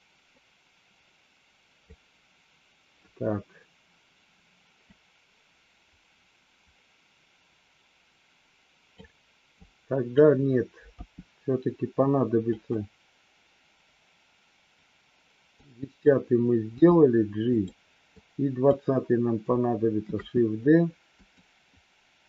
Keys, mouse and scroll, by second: 4.9-9.0 drag, 9.5 click, 10.9 g, 15.5 click, 16.6 g, 18.0 click, 20.0 shift+d.